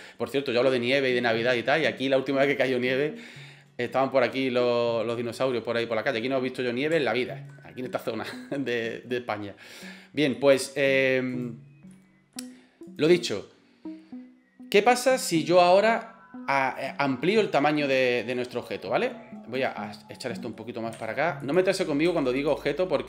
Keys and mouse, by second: 5.1-5.5 middle drag, 6.6 middle click, 7.0 shift+middle click, 10.4 middle click, 11.3 right click, 12.0 middle click, 12.9 right click, 18.7-19.0 middle drag, 19.6 right click, 20.2 middle click, 21.0 g, 22.1 g.